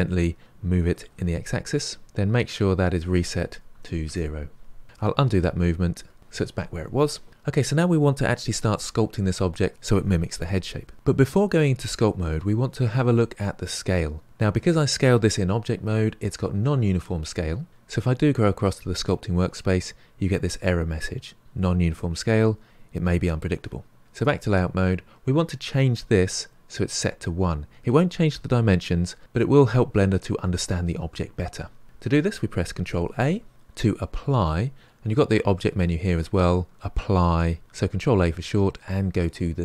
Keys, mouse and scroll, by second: 1.1 g, 2.4-4.8 drag, 5.1 ctrl+z, 5.4 ctrl+z, 18.9 click, 24.1-39.6 drag.